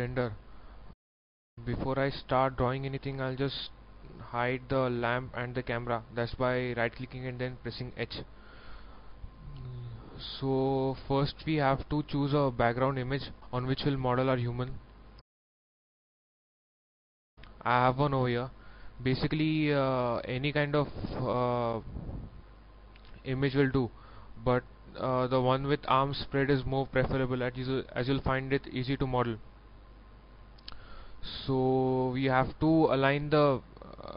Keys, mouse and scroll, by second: 0.8 scroll down 1, 1.4 shift+middle click, 3.9 right click, 4.9 h, 8.0 scroll up 1, 8.6 scroll down 1, 10.1 shift+middle click, 10.7 scroll up 1, 12.3-22.2 drag, 20.7-22.2 scroll down 1, 23.3 scroll up 1, 23.9-24.8 scroll down 1, 24.8 scroll up 1, 25.8 click, 29.8 scroll up 1, 30.3 shift+middle click, 31.0 scroll up 1, 31.7 shift+middle click, 32.2 scroll up 1.